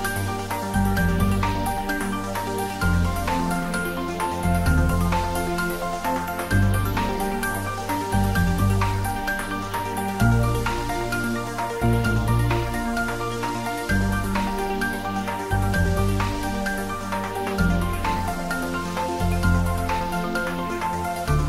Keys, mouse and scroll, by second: 0.5-3.9 middle drag, 3.9-4.3 ctrl+middle click, 4.8 click, 6.0 click, 8.0 click, 9.4 `, 10.3 click, 10.7-11.2 ctrl+middle click, 11.3 ctrl+s, 11.8 s, 12.9 click, 17.1 click, 18.4 click.